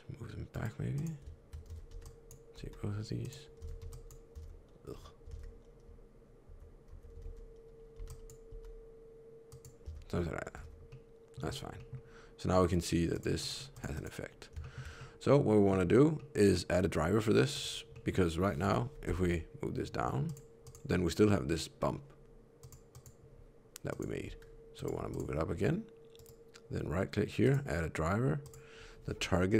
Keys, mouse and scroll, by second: 0.9 click, 1.6 alt+z, 1.8 b, 2.5 g, 3.5 alt+z, 3.7 b, 4.3 alt+z, 6.4 alt+z, 6.8 alt+z, 7.1 alt+a, 7.9 b, 8.4 g, 9.8 Tab, 10.0 scroll down 4, 10.5 alt+z, 10.8 middle click, 11.4 scroll down 1, 11.7 middle click, 13.0 click, 13.3 click, 13.4 scroll up 1, 13.6 click, 13.8 click, 14.5 shift+middle click, 14.9 middle click, 15.8 scroll down 1, 16.1 middle click, 17.5 click, 17.8 middle click, 18.6 KP_3, 19.0 r, 20.5 click, 22.5 click, 22.8 click, 23.8 click, 24.1 r, 25.0 click, 26.1 right click.